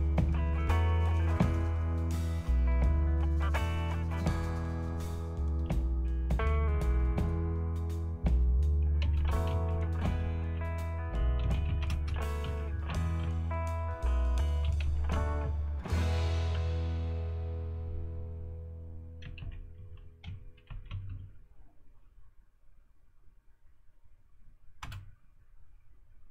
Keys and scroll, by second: 8.8-16.5 typing, 19.2-21.6 typing, 24.8 Return.